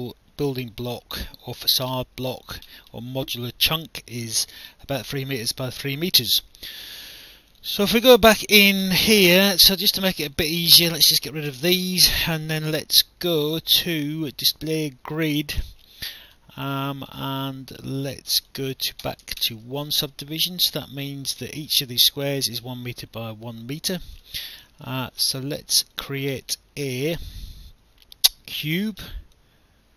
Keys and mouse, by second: 6.7 click, 8.2 alt+click, 9.0 alt+middle click, 10.1 Delete, 10.8 click, 11.5 Delete, 12.7 click, 15.5 click, 18.4 click, 19.1 BackSpace, 19.3 1, 19.4 Return, 20.7 click, 24.0 click, 24.4 alt+click, 26.0 click, 28.6 click.